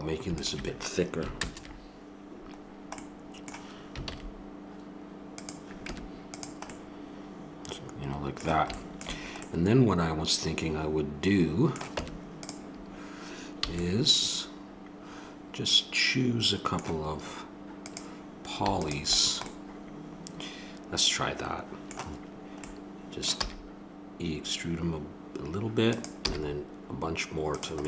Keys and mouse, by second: 1.3 ctrl+KP_Add, 3.4 middle click, 4.0 alt+s, 5.8 Tab, 6.7-7.2 middle drag, 7.6 middle click, 10.0-10.9 middle drag, 11.1-11.4 middle drag, 11.5 middle click, 12.0 Tab, 12.9 middle click, 13.6 a, 17.8 click, 19.2-20.6 drag, 20.6 middle click, 22.7-24.5 middle drag, 23.4 e, 26.2 e.